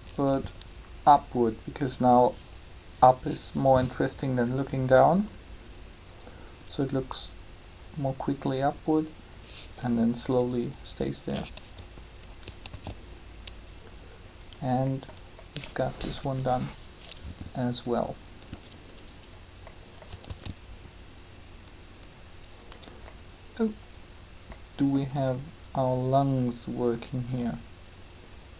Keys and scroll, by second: 12.5 alt+a, 16.0 3, 20.3 alt+a.